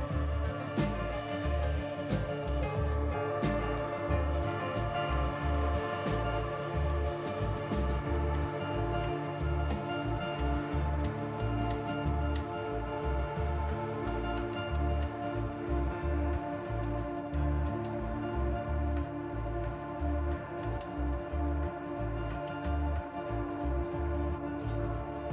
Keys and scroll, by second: 1.8 s, 6.5 s, 7.2 s, 8.3 s, 9.2 F4, 11.3 F4, 11.8 4, 12.0 Delete, 12.6 Delete, 13.2 s, 15.7 F4, 17.3 F4, 17.9 s, 18.7 s, 20.3 F4, 21.0 F4, 21.4 s, 22.5 F4, 23.5 s.